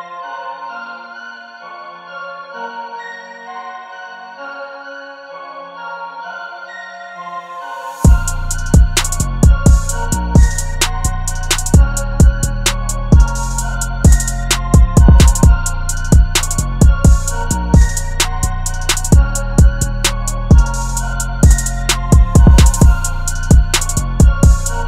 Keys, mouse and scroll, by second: 6.0 [, 13.9-14.3 typing, 15.6 double click, 22.2 double click.